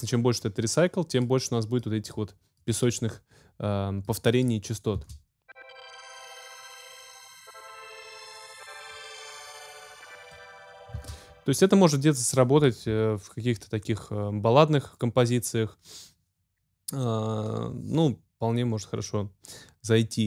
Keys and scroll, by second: 5.0 space, 10.9 space.